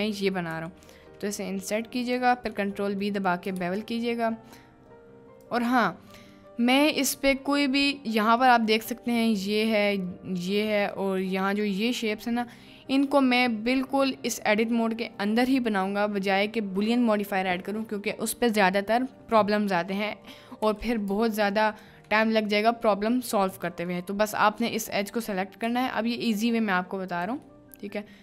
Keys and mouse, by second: 2.1 click, 2.7 middle click, 3.6 ctrl+b, 5.4 click, 7.5 click, 8.5 click, 10.8 middle click, 11.2 middle click, 12.4 middle click, 12.6 drag, 13.1 click, 21.4 ctrl+click, 22.9 middle click, 23.8 click, 25.8 e, 27.6 click, 27.7 middle click.